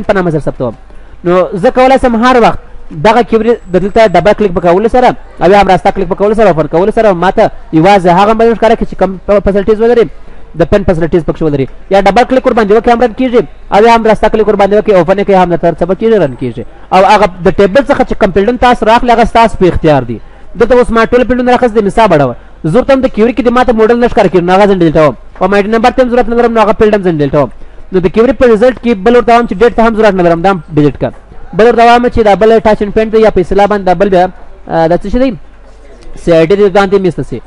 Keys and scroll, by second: 3.2 ctrl+w, 11.0 ctrl+w.